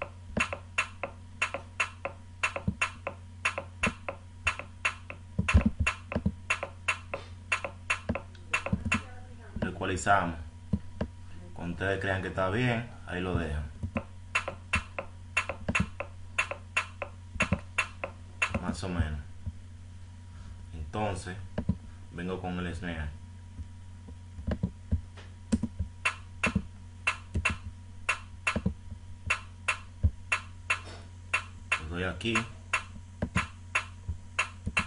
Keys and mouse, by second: 14.7 click, 19.0-20.0 drag, 20.2-25.5 drag, 25.8-26.4 drag, 28.8 click, 30.3 click.